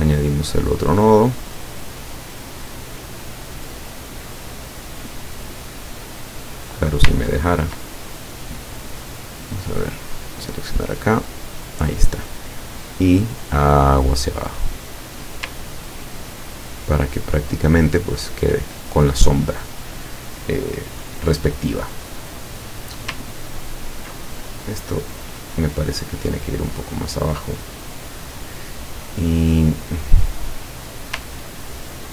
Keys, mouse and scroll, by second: 0.2 click, 0.9-2.1 drag, 3.7 click, 5.0 click, 5.5 click, 6.6 click, 7.1 ctrl+click, 7.9 ctrl+click, 9.9 click, 10.3 click, 11.2 click, 13.0-15.4 drag, 15.9-16.2 ctrl+scroll down 2, 16.4 ctrl+scroll down 2, 17.0 ctrl+middle click, 17.8 ctrl+scroll down 2, 23.6-24.1 ctrl+scroll up 2, 24.3 ctrl+click, 25.6-28.5 drag, 31.6-31.9 ctrl+scroll down 2.